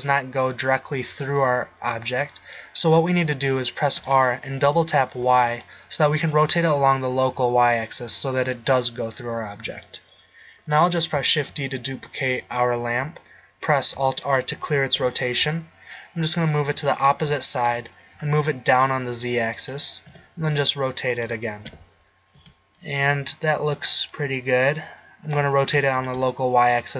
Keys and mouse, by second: 4.0 r, 8.0-10.1 middle drag, 11.4 shift+d, 14.3 alt+r, 15.1 KP_7, 17.9 KP_1, 20.2 r, 21.8 KP_7, 22.5 r, 24.0-24.8 middle drag, 25.8 r.